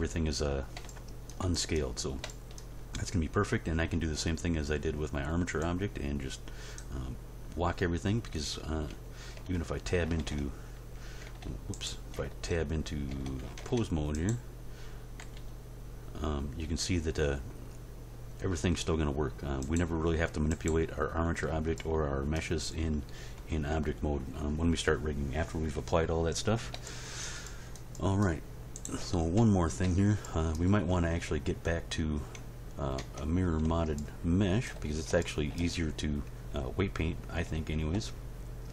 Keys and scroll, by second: 9.3 Tab, 10.2 ctrl+Tab, 11.2 Tab, 13.6 ctrl+Tab, 15.2 r, 23.7 End, 24.0 Page_Down, 29.4 End, 33.0 Tab.